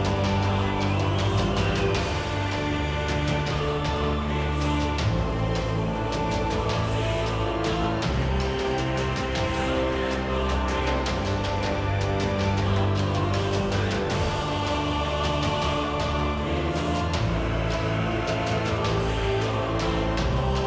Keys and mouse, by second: 0.0 ctrl+1, 0.2 middle click, 0.5 ctrl+1, 1.0 Tab, 2.3 click, 3.2 shift+e, 3.5 Tab, 3.8 KP_7, 3.8 z, 4.4 Tab, 4.8 z, 5.9 shift+e, 6.0 Tab, 6.2 z, 6.5 KP_7, 6.8 Tab, 7.1 middle click, 8.0 KP_Divide, 8.1-10.3 typing, 8.9 Tab, 9.2 Tab, 9.9 Tab, 12.5 z, 12.7 Tab, 13.0 Tab, 14.3 KP_7, 14.5 z, 16.1 shift+c, 16.2 shift+a, 16.8 Tab, 17.0 g, 17.7 g, 18.9 ctrl+r, 19.3-19.8 drag, 19.6 x.